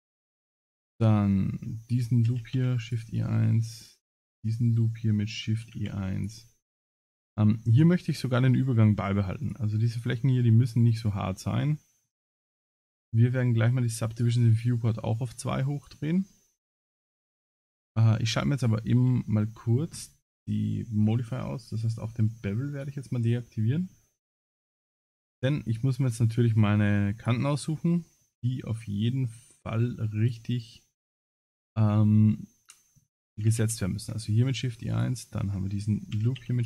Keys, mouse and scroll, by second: 0.2 middle click, 0.8 alt+click, 2.3 shift+e, 4.0 alt+click, 4.5 middle click, 5.6 shift+e, 9.4 click, 11.3 middle click, 14.1 click, 14.7 middle click, 15.3 middle click, 17.9 click, 18.8 scroll up 3, 19.2 shift+middle click, 21.0-21.5 scroll down 9, 22.8 click, 22.8 scroll down 7, 23.4 middle click, 24.3 2, 24.7 alt+click, 25.7 shift+click, 26.2 shift+middle click, 27.2 shift+click, 27.6 shift+middle click, 28.5 middle click, 30.2 alt+shift+click, 31.7 middle click, 33.3 shift+e, 34.9 alt+click, 36.1 shift+e.